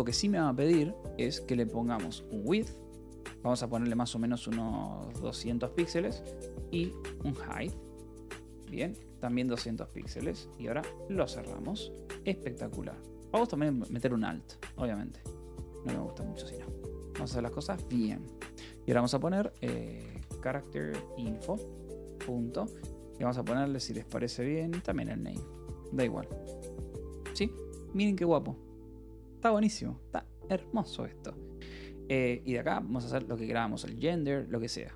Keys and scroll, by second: 1.0-3.1 typing, 4.2-10.3 typing, 11.2 Escape, 11.5 h, 12.3 h, 13.9-17.9 typing, 19.0-22.0 typing, 24.1 shift+n, 24.8 Return, 25.2 Escape, 26.3 ctrl+s, 26.4-29.1 typing, 33.8 ctrl+s.